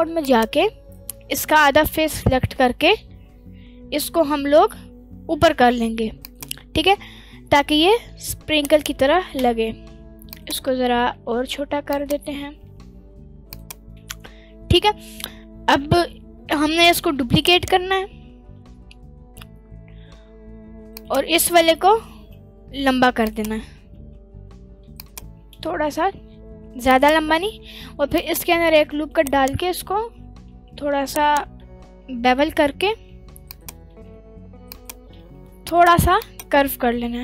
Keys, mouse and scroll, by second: 0.2 click, 1.3-1.9 scroll down 1, 1.9 g, 6.2 ctrl+click, 6.8 Tab, 7.6 s, 8.7 right click, 9.0 s, 9.2 shift+z, 10.3 ctrl+click, 10.9 s, 11.0 z, 11.9 ctrl+click, 12.7 s, 13.5 click, 15.7-16.1 scroll down 1, 17.0 scroll down 1, 17.0 shift+d, 17.5 right click, 18.2 g, 18.4 x, 20.9 click, 21.2 s, 21.3 x, 22.0 right click, 22.1 s, 23.2 ctrl+click, 23.9 g, 24.9 click, 24.9 z, 25.3 s, 26.9 ctrl+click, 27.4 Tab, 28.2 click, 28.7 ctrl+r, 29.3 right click, 30.0 g, 30.1 x, 31.1-32.2 drag, 31.1 right click, 32.2 ctrl+b, 33.5 click, 33.9 g, 34.0 x, 34.7 click, 35.1 g, 35.2 x, 35.7 click, 36.2 click, 36.7 g, 36.8 x.